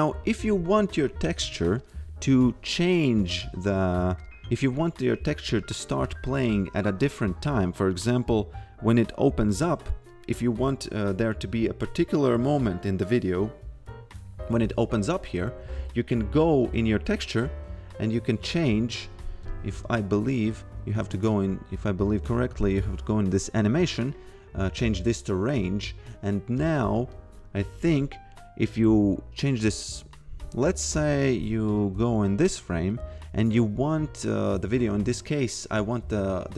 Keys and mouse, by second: 1.8 click, 4.2 click, 6.0 click, 16.8 click, 19.9 x, 20.4 click, 23.8 click, 26.6 click, 31.8 click.